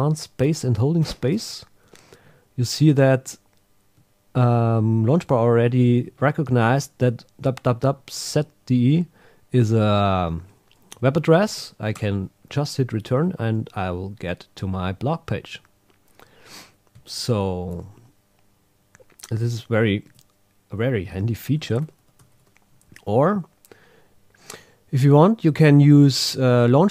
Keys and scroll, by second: 12.0 Return, 17.7 super+h, 21.6 super+Tab, 21.8 super+Right, 22.2 super+Left.